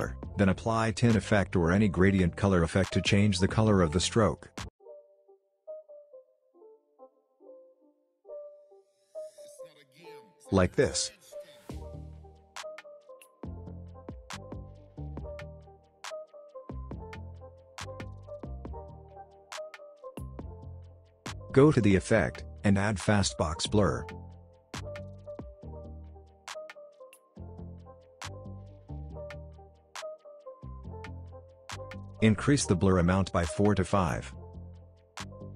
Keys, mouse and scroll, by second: 4.5-7.3 typing, 5.4 click, 7.2-7.8 drag, 18.0 space, 19.7 click, 21.0-21.4 scroll up 1, 21.4-22.3 scroll down 1, 22.3 click, 26.3-29.7 typing, 31.0-35.3 drag.